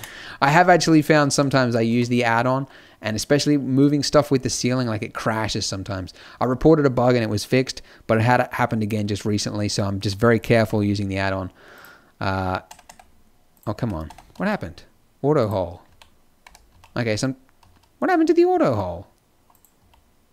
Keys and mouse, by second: 1.3 z, 1.8 z, 10.6 t, 12.6 Tab, 12.8 Tab, 13.7 Tab, 14.0 Tab, 14.3 z, 15.8 z, 16.3 t, 16.6 z, 17.5 z, 19.7 z.